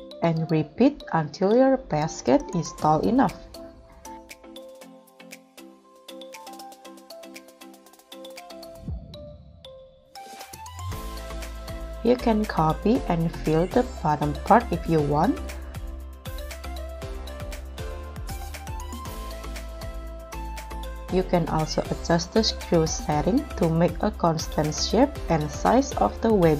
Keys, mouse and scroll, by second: 0.9 z, 3.7 shift+d, 4.0 z, 6.3-6.9 scroll down 3, 6.9-7.6 scroll up 2, 7.6 middle click, 9.2-10.4 scroll up 3, 10.4 KP_1, 12.6 shift+d, 14.8 shift+d, 16.4 shift+d, 18.2 shift+d, 19.9 shift+d, 20.0-20.4 scroll up 2, 20.4 middle click, 21.0-21.4 scroll down 4, 21.4 scroll up 4, 22.0 middle click, 23.0 scroll up 1, 23.6 w, 23.8 g, 26.3 Escape.